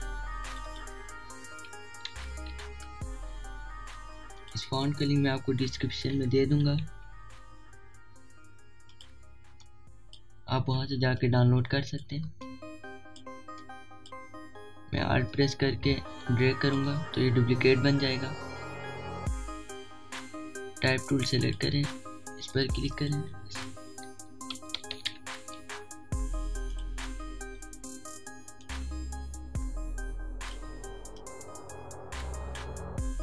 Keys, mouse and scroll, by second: 0.0 Return, 1.2 click, 2.2 1, 3.5 Return, 5.0 click, 6.8 c, 9.1-9.8 typing, 9.5-11.8 drag, 11.8-16.0 alt+shift+drag, 16.0-22.0 alt+drag, 16.3 typing, 23.2 click, 27.3 click, 29.3-33.2 alt+shift+drag, 31.2 typing.